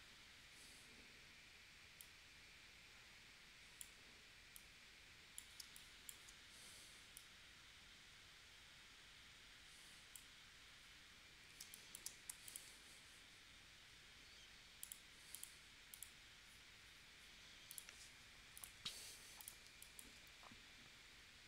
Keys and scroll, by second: 5.6 space, 11.7 space, 12.3 v, 19.7 space.